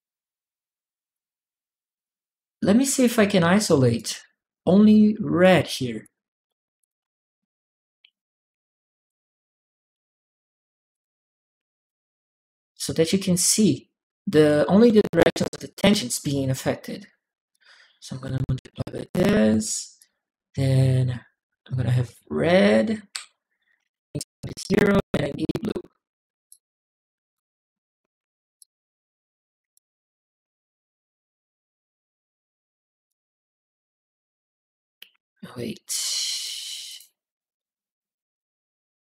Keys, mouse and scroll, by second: 0.9 click, 2.7 click, 3.7 click, 5.2 click, 5.8 click, 6.6 click, 7.8 m, 7.9 click, 7.9 m, 8.6 click, 10.6 3, 10.7 3, 10.7 click, 10.7 3, 10.8 3, 11.4 click, 12.0 click, 13.0 click, 14.7 alt+click, 17.3 alt+click, 18.8 alt+click, 19.7 alt+click, 23.5 alt+Tab, 26.3 click, 28.4-29.5 drag, 32.9-34.5 right drag, 36.7 click, 38.9 click.